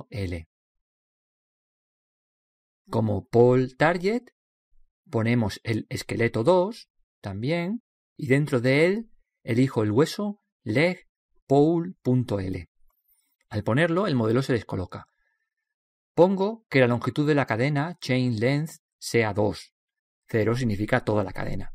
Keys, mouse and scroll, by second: 3.6-5.3 drag, 5.4 click, 7.2 click, 12.2-14.5 middle drag, 17.8 click, 20.7-21.7 middle drag.